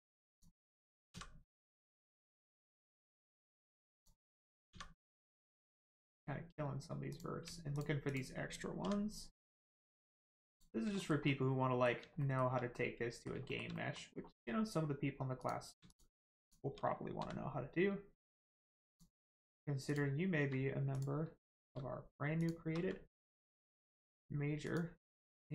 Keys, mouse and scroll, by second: 0.3 shift+click, 2.3 click, 2.9 shift+middle click, 3.3 middle click, 3.4 middle click, 3.9 click, 4.7 x, 5.9 click, 8.1 shift+click, 8.8 x, 10.5 click, 11.0 shift+middle click, 11.2 middle click, 12.2 shift+middle click, 12.7 middle click, 12.8 middle click, 13.4 shift+middle click, 13.7 middle click, 13.8 middle click, 14.1-14.6 scroll up 1, 15.4 click, 15.8 shift+click, 17.2 x, 18.8 click, 18.8 click, 20.4 x, 20.9 click, 22.4 shift+click, 22.8 x, 24.6 click, 25.1 middle click.